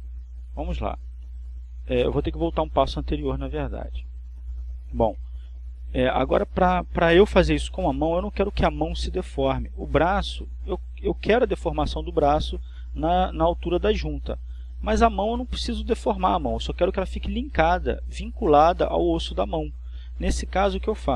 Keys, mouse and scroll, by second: 8.2 Escape, 9.6 a.